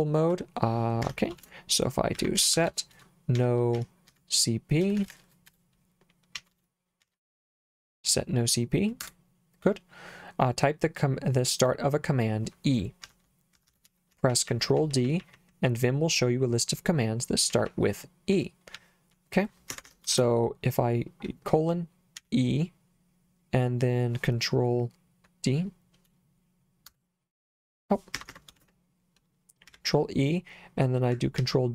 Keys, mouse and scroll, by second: 1.1 Escape, 1.4-7.7 typing, 9.0 Return, 13.1 Escape, 13.6-16.1 typing, 17.3-20.1 typing, 19.7 Escape, 22.2 e, 26.9 Return, 28.1 Escape, 28.6 shift+;, 29.7 e, 31.4 ctrl+d.